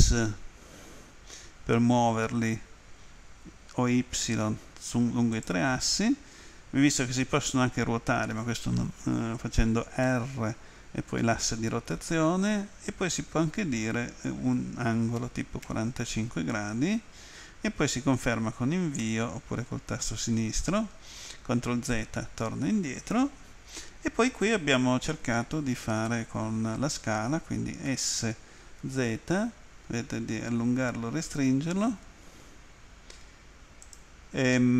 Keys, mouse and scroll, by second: 4.0 y, 5.4 click, 12.0 x, 15.0-16.2 typing, 19.1 Return, 28.9 z, 33.9 click.